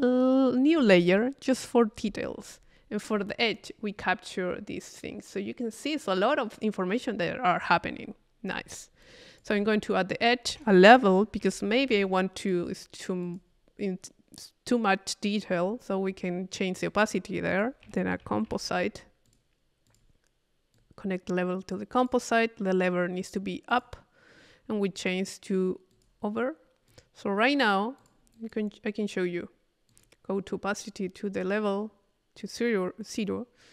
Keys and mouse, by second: 2.6-6.4 middle drag, 7.8-9.0 middle drag, 9.0 click, 9.9 click, 10.1 click, 10.5 Tab, 12.4 click, 13.3 click, 14.0 click, 16.9 right click, 17.5 click, 17.8 c, 19.3 click, 19.9 click, 20.7-21.9 drag, 21.9 click, 23.7 click, 25.0 click, 25.9 click, 26.9-29.0 drag, 29.9 click, 32.4-33.7 drag.